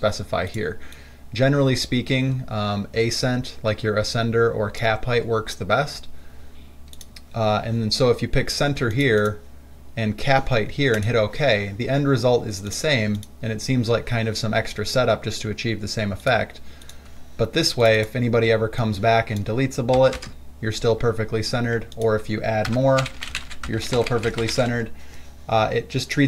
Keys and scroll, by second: 20.2 BackSpace, 20.4 BackSpace, 22.9 Return, 23.0-25.3 typing.